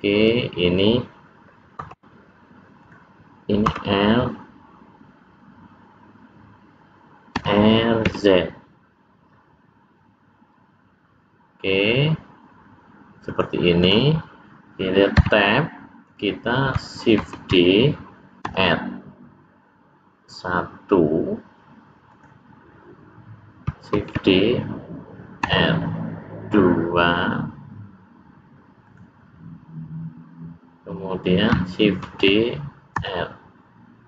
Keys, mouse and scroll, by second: 1.8 l, 2.7 click, 3.6 l, 7.3 r, 13.7 click, 15.2 Tab, 17.3 shift+d, 24.0 shift+d, 32.1 shift+d.